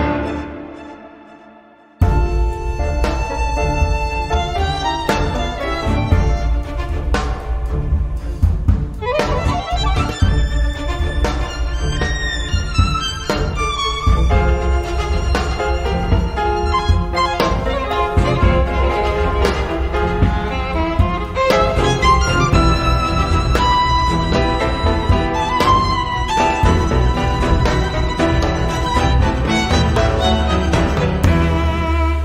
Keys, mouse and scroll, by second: 0.6 F2, 2.8-5.5 typing, 3.9 Caps_Lock, 6.4 click, 7.2 click, 8.8 click, 9.8 click, 10.4 click, 11.0 space, 12.6-15.0 drag, 15.0 0, 17.4 click, 19.0 click, 20.1 click, 21.2 click, 22.4 3, 23.1-24.1 drag, 24.4 4, 25.0 0, 25.6 Return, 26.0 click, 28.2 click, 29.4 5, 30.9 click.